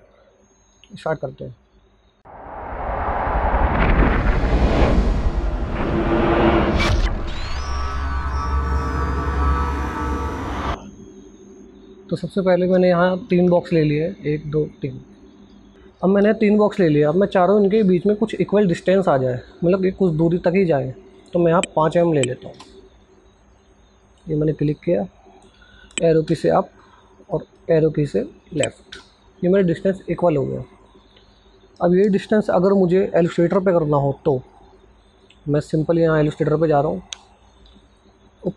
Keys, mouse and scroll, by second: 13.5 click, 17.1 click, 24.0 click, 25.9 Up, 26.8 click, 28.5 Left, 30.2 click, 34.1 click.